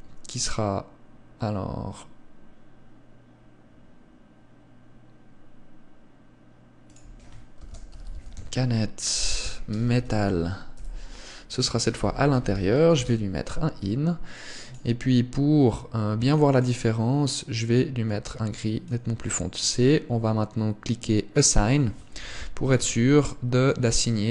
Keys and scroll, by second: 22.5 z, 23.1 Tab.